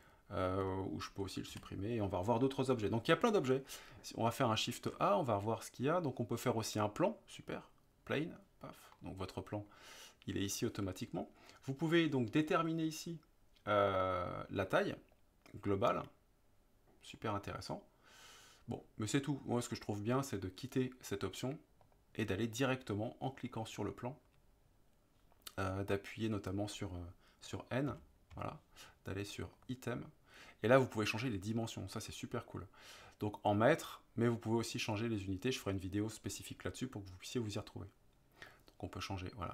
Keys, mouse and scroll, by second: 1.5 Delete, 4.8 shift+a, 9.1-9.7 middle drag, 15.3-20.1 drag, 27.9 n, 28.4 n, 29.6 click, 38.5-39.5 drag.